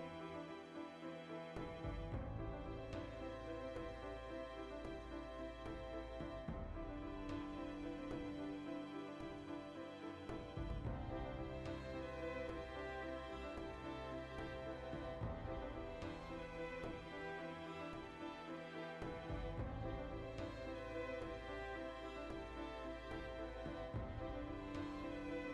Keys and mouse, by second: 0.9 alt+right click, 1.5 ctrl+KP_Add, 2.4 x, 3.2 right click, 3.9 f, 4.2 right click, 4.4 f, 5.6-6.8 middle drag, 6.6 3, 6.8 alt+right click, 7.2 ctrl+KP_Add, 8.1-9.1 middle drag, 8.7 e, 10.1 click, 11.0 ctrl+middle click, 11.8-14.2 right drag, 14.2 g, 14.8 right click, 15.0 g, 15.6 right click, 15.7-17.0 middle drag, 17.0 shift+right click, 17.8 g, 18.3 click, 18.5-20.4 middle drag, 18.9 ctrl+z, 19.1 shift+Tab, 20.4 click, 20.5 middle click, 21.3 Tab, 21.5-21.9 middle drag, 21.9 Tab, 22.1 ctrl+middle click, 23.1 ctrl+z, 23.2-25.5 middle drag.